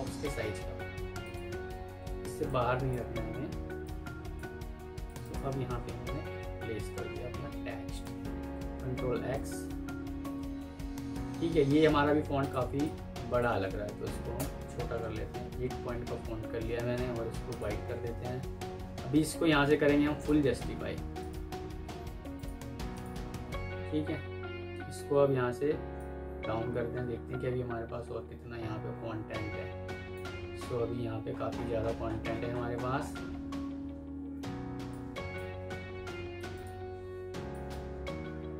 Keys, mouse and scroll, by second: 5.1 double click, 6.1 typing, 10.4-11.2 typing, 12.7 double click, 14.2 Return, 23.8 alt+scroll down 1, 30.7 alt+scroll down 1, 31.2-31.6 alt+scroll up 1, 34.1 F2, 35.3 Escape, 37.4 alt+click.